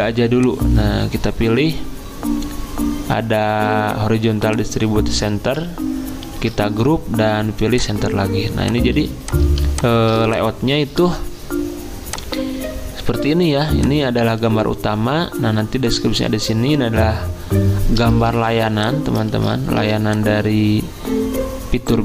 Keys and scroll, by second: 6.3 ctrl+g, 8.9 z, 12.5 z, 18.4 v, 19.4 ctrl+z.